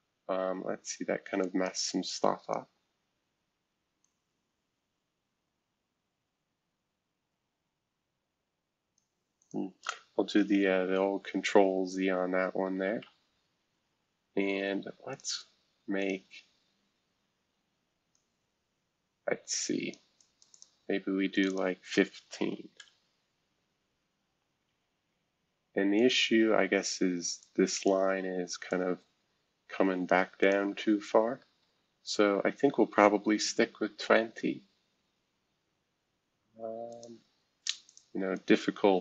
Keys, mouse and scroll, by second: 1.4-9.4 drag, 9.2-9.9 typing, 10.3 ctrl+z, 10.8 ctrl+z, 13.0 ctrl+z, 13.8-14.5 scroll down 1, 14.5-15.1 scroll down 1, 15.1 click, 16.0 click, 18.1-19.9 drag, 20.2 click, 20.5 click, 21.3 click, 22.2-23.0 typing, 26.0 click, 27.4 click, 28.7-30.1 drag, 30.4 click, 30.7 ctrl+z, 31.6 ctrl+z, 32.2 ctrl+z, 33.6-35.5 scroll down 2, 35.5-36.2 scroll down 1, 36.2-36.9 scroll down 1, 36.9-39.0 drag.